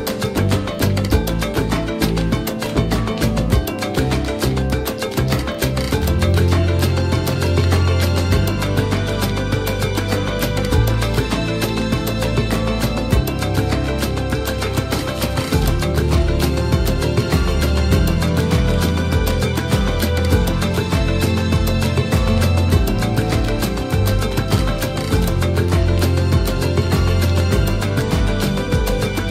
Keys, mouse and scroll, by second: 1.5 click, 2.0-2.5 scroll up 3, 2.5 middle click, 2.5 scroll, 3.3-8.4 drag, 8.4 Escape, 9.6-19.3 drag, 19.3-20.2 scroll up 18, 20.2-22.0 scroll down 13, 22.0 click, 22.3-23.1 scroll up 4, 23.1 m, 24.3 click, 25.1 BackSpace, 25.7 Tab, 26.6-29.3 drag.